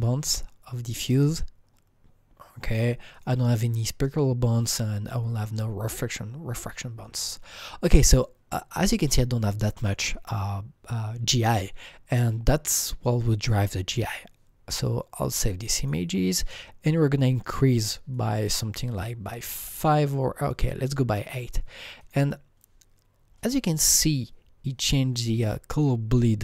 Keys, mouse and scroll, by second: 0.2-2.9 drag, 3.1-5.7 drag, 15.7 click, 18.1-21.1 drag, 22.0 click, 23.8-26.2 drag, 26.1-26.4 scroll up 10.